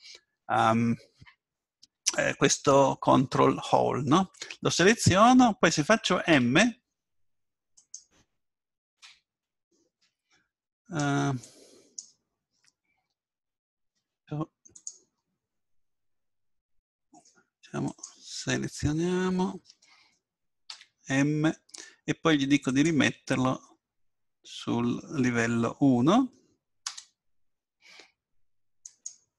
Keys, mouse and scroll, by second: 15.5-17.7 right drag, 17.0-19.7 drag, 20.7 m, 28.9-29.3 drag.